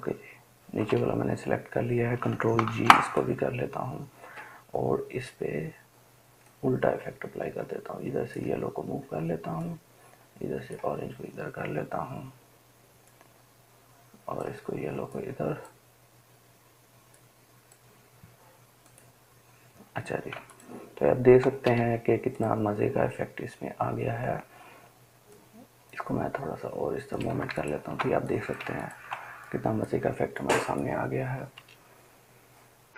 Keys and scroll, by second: 20.6 ctrl+space, 21.1 ctrl+space.